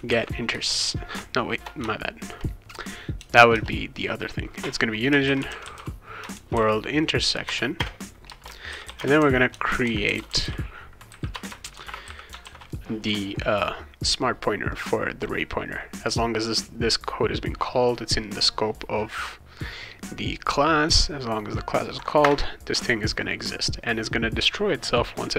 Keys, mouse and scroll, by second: 0.0-1.8 typing, 3.1 BackSpace, 3.5 BackSpace, 5.0-12.5 typing, 7.4 Return, 11.3 Return, 14.7 click, 22.2 Return.